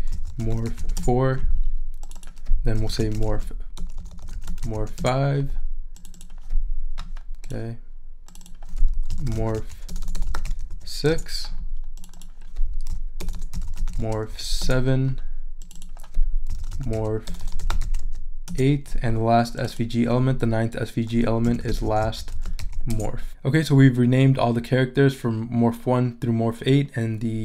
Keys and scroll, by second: 0.0-1.3 typing, 2.5-5.0 typing, 8.8-10.8 typing, 12.9-14.8 typing, 16.3-18.2 typing, 18.5 Return, 21.2-22.4 typing.